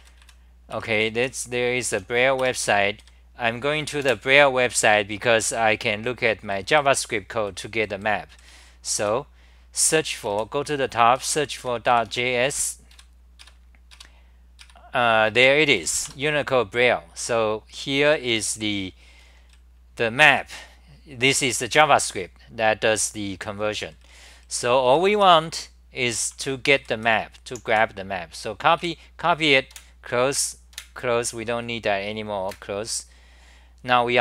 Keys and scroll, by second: 0.0 Left, 0.7 Return, 0.9 c, 1.2 c, 2.5 Return, 3.0 3, 4.0 super+r, 6.7 d, 10.1-11.6 typing, 12.9 Right, 15.4 Return, 15.8 g, 16.2 Return, 18.1 super+=, 19.2-20.3 typing, 22.1-23.3 s, 23.3 d, 25.8-28.8 typing, 29.8 super+w.